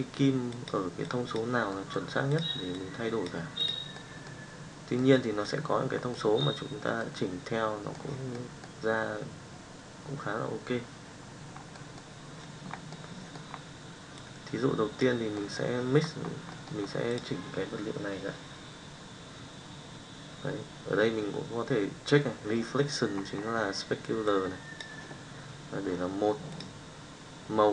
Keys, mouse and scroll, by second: 6.3 middle click, 7.1 middle click, 13.0 middle click, 14.3 click, 15.4 middle click, 24.2 click.